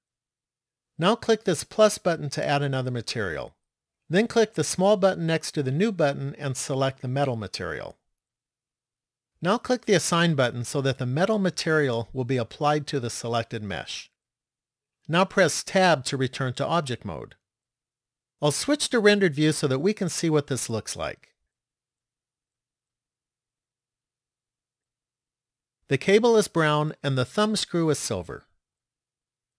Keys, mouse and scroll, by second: 2.6 click, 5.0 click, 10.3 click, 15.9 Tab, 18.9 click, 29.3 click.